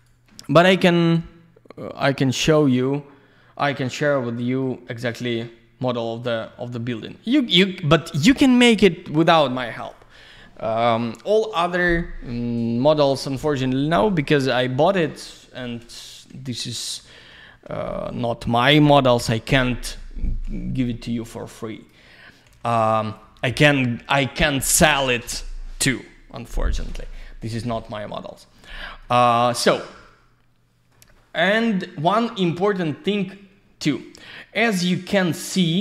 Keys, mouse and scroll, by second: 2.2 click, 3.7 ctrl+click, 4.1 alt+middle click, 4.9-5.3 scroll up 1, 6.1-6.4 scroll down 1, 6.5 alt+middle click, 7.0 double middle click, 7.2-7.6 scroll down 1, 9.8 click, 11.2 click, 12.9 F4, 17.0 F3, 18.2 alt+middle click, 20.9 alt+middle click, 21.3 alt+z, 21.5 click, 22.1 alt+middle click, 22.5 alt+z, 22.6 click, 23.2 F4, 28.6 alt+middle click, 29.2 middle click, 29.7 scroll down 1, 30.0 alt+middle click, 31.1 middle click, 31.5 alt+z, 31.6 click, 33.2 q.